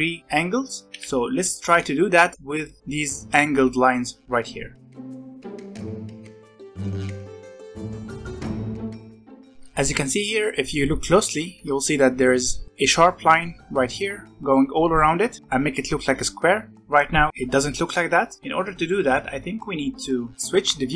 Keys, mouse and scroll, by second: 1.0 ctrl+z, 1.5-2.8 shift+middle drag, 4.7-6.3 drag, 6.4 middle click, 6.5 ctrl+z, 6.6 click, 6.9 ctrl+z, 7.0-8.0 drag, 8.0 ctrl+z, 8.1-9.4 drag, 9.6 middle click, 9.9-12.1 scroll up 1, 12.1-12.6 scroll up 1, 12.6-15.4 middle drag, 20.3 scroll down 1, 20.3 middle click, 20.8-20.9 drag.